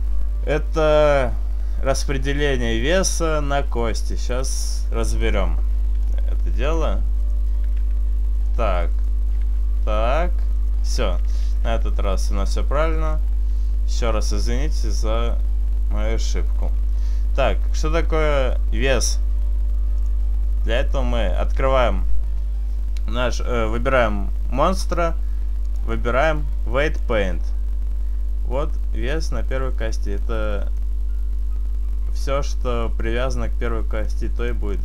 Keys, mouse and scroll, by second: 4.4 right click, 6.1 right click, 6.1 click, 6.9 right click, 7.8 r, 9.0 right click, 9.4 r, 10.6 right click, 11.4 right click, 12.2 r, 12.8 right click, 12.8 middle click, 19.9 click, 21.5 right click, 25.7 click, 26.9 click, 30.2 middle click, 34.1 middle click, 34.5 middle click.